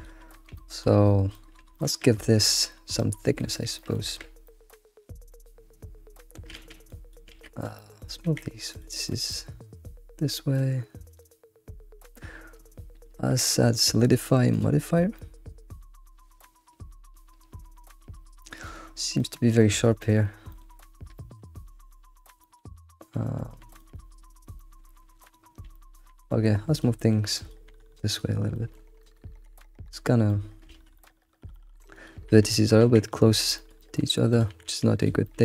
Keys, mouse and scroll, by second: 0.0 click, 0.4 scroll down 1, 0.6 middle drag, 1.2-2.1 middle drag, 2.1 scroll up 3, 2.5-4.1 middle drag, 4.1 Tab, 4.4-6.5 middle drag, 4.7 Tab, 6.5 alt+x, 6.9 click, 7.3 alt+x, 7.7 middle click, 8.2 g, 8.4 e, 9.3-11.5 middle drag, 12.0 middle click, 13.3 q, 15.1 scroll down 1, 15.2-18.2 middle drag, 19.2 middle click, 20.6 alt+middle click, 21.2 shift+middle click, 21.4-22.2 scroll up 5, 22.2 scroll down 3, 22.4 alt+middle click, 23.8 click, 24.4 scroll down 2, 24.6 middle click, 25.3-25.7 scroll up 4, 25.7 middle click, 26.1 g, 27.0 shift+middle click, 27.3 click, 27.7 g, 28.5 shift+middle click, 29.0 click, 29.3 g, 30.1 scroll down 2, 30.3 middle click, 30.7 alt+x, 30.9 shift+middle click, 31.4 scroll up 1, 31.5 middle click, 31.9 click, 32.3 g, 33.5 shift+middle click, 34.3 click, 34.5 g, 35.2-35.4 shift+middle drag.